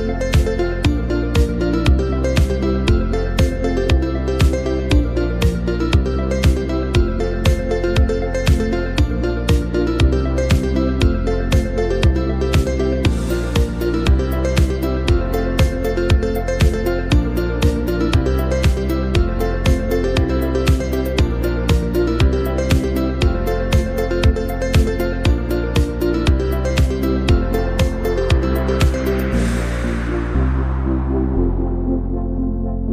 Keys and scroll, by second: 18.4 super+-, 18.6 super+-, 18.8 super+-, 19.8 z, 21.1 v, 27.0-28.3 typing.